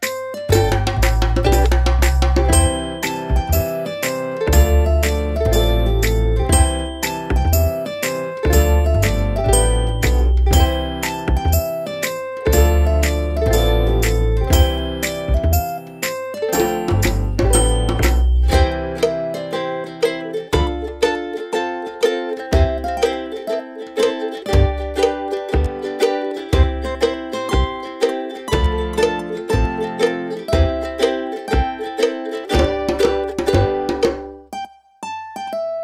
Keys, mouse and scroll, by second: 3.9 ctrl+click, 8.3 click, 32.6 click, 34.7 click, 35.7-35.8 alt+scroll up 2.